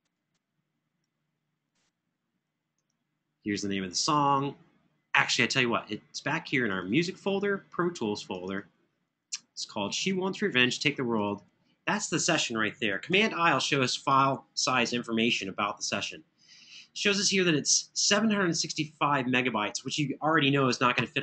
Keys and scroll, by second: 12.9 super+i.